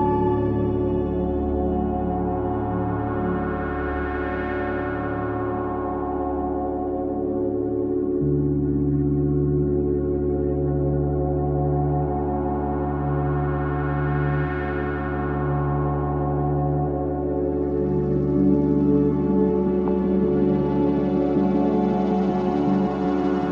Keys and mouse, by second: 2.6-4.4 alt+drag, 4.6 alt+click, 8.2 typing, 9.2 click, 10.5 click, 11.1 click, 11.8 ctrl+z, 12.4 ctrl+z, 13.3-14.6 alt+drag, 14.9-17.9 ctrl+alt+drag, 19.4 7, 21.0-21.9 drag.